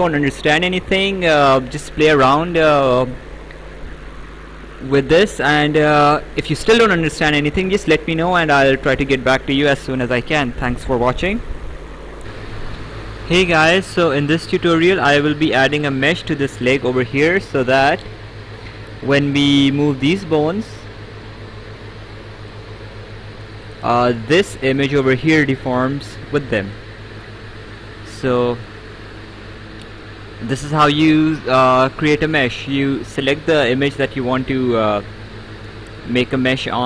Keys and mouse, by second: 6.5 click, 8.7 click, 12.8 right click, 16.4 click, 18.4 click, 19.7 click, 22.2 click, 23.6 ctrl+z, 24.0 ctrl+z, 24.7 click, 28.6 right click.